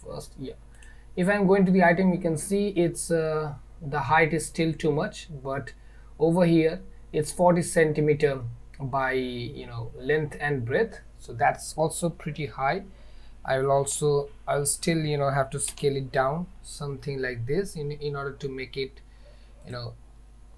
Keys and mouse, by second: 0.8 click, 15.8 s.